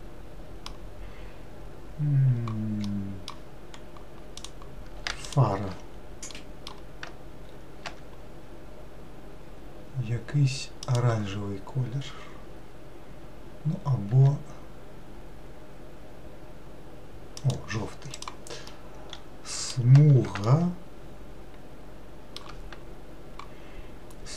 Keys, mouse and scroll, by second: 3.8-4.6 scroll up 1, 4.6 click, 8.1 g, 14.3 g, 18.4 click, 19.0-24.3 middle drag.